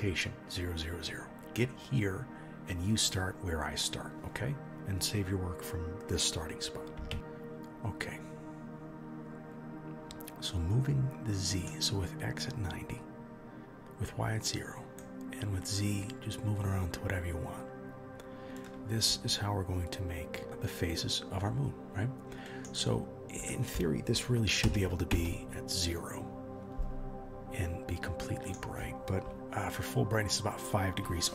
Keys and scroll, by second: 7.1 ctrl+s.